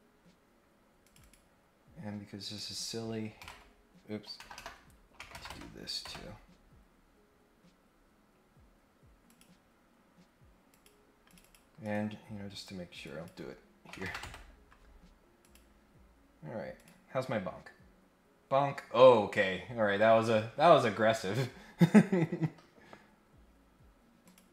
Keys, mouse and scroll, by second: 1.0 click, 2.4 click, 7.2-7.8 scroll down 4, 7.8 scroll up 2, 8.2 scroll down 1, 9.2 click, 10.7 click, 11.3 click, 11.4 click, 11.8 right click, 13.0 click, 15.4 click, 16.7 click, 23.2 scroll up 2, 24.2 click.